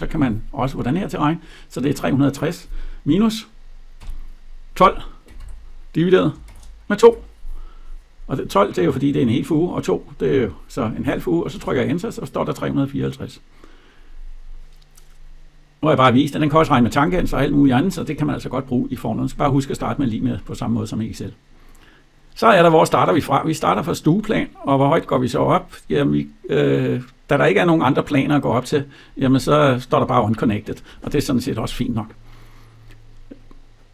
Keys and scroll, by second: 11.4 Return.